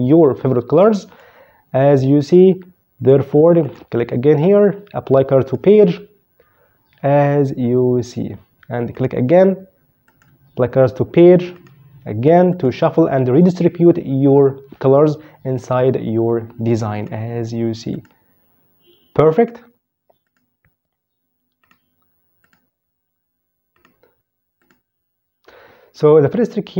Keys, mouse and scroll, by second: 1.7 click, 3.3 right click, 5.1 click, 8.7 right click, 9.8 click, 11.3 right click, 12.2 click, 16.6 right click, 17.6 click, 19.1 right click, 20.0 click, 21.3 right click, 22.2 click, 23.5 right click, 24.3 click.